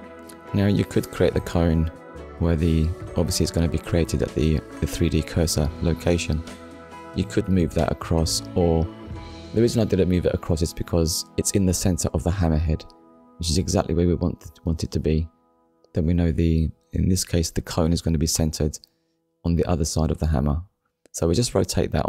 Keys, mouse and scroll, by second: 1.5 click, 3.2 click, 4.4 KP_4, 5.1 Return, 9.6 middle click, 12.4 click, 13.1 click, 13.5 shift+middle click, 17.5 click, 18.2 middle click, 21.4 click.